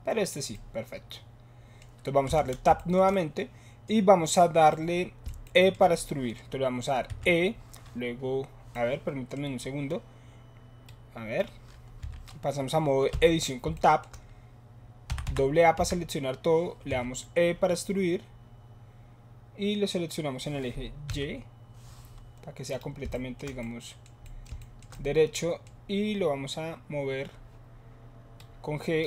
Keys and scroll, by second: 2.3 Tab, 7.0 e, 12.0 e, 13.1 Tab, 15.0 a, 15.2 a, 15.7 a, 16.8 e, 21.1 y.